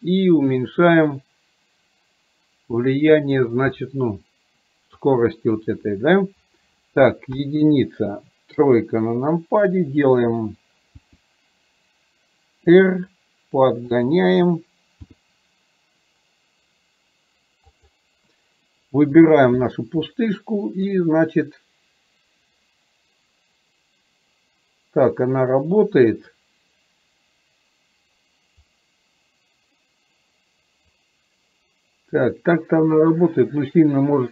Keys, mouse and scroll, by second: 0.3-3.4 drag, 3.9-5.1 middle drag, 21.1-34.3 drag.